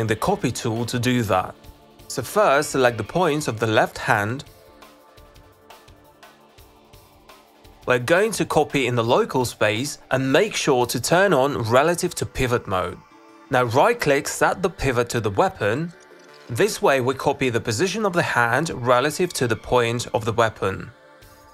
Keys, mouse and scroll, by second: 0.7 click, 1.3 click, 1.5 click, 7.3-8.3 alt+drag, 11.2 click, 11.7 click, 13.7 middle click, 17.6 click, 19.9 ctrl+c.